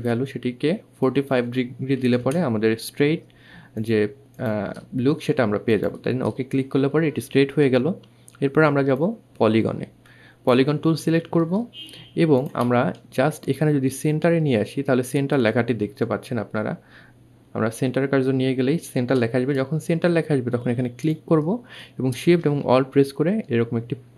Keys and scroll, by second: 0.9 KP_4, 14.8 2, 17.9 2.